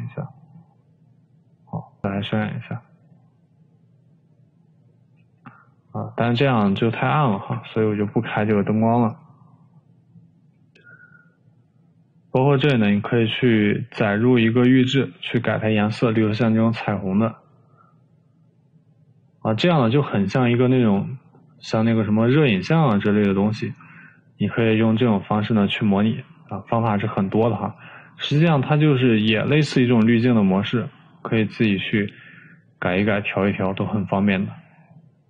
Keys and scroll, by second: 6.2 Escape, 7.8 Delete.